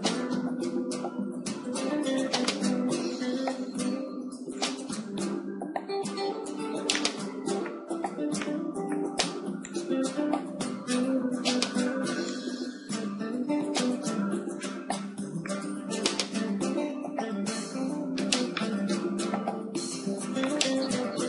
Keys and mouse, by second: 2.8 s, 5.2-6.9 drag, 6.0 Tab, 6.1 Tab, 6.6 Tab, 6.9-8.5 middle drag, 7.8 z, 9.8-14.5 drag, 11.4 Tab, 13.8 Tab, 14.5-17.4 middle drag, 15.5 Tab, 17.4 KP_7, 18.1 middle click, 18.9 z, 19.8 shift+d.